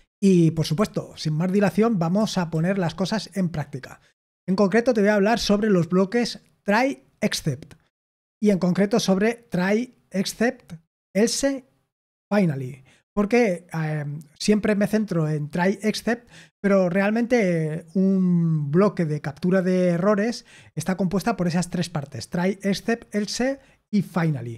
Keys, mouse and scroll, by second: 0.7 super+l, 1.5 super+h, 2.1 super+l, 2.4 super+l.